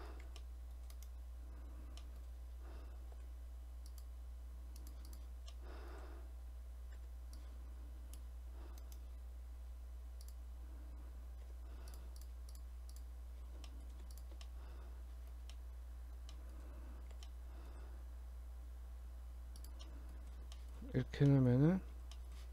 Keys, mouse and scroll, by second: 0.3 g, 2.1 middle click, 3.2 ctrl+r, 5.1 click, 5.5 middle click, 7.0 c, 10.3 click, 11.5 3, 11.9 click, 12.3 shift+click, 12.5 shift+click, 13.7 middle click, 14.2 shift+click, 14.5 middle click, 15.4 scroll down 1, 15.6 middle click, 16.3 middle click, 17.1 g, 19.9 middle click, 20.2 scroll up 1, 20.6 shift+middle click, 21.0 Tab, 21.3 middle click, 21.6-22.2 scroll up 2, 22.2 shift+middle click.